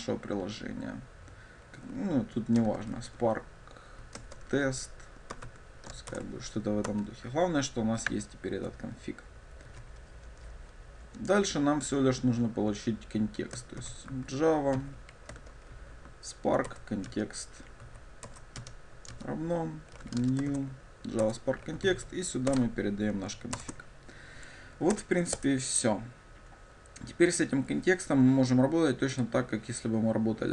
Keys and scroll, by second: 6.2 ctrl+shift+super+Return, 16.9 Return, 18.4 Return, 23.7 ctrl+shift+super+Return.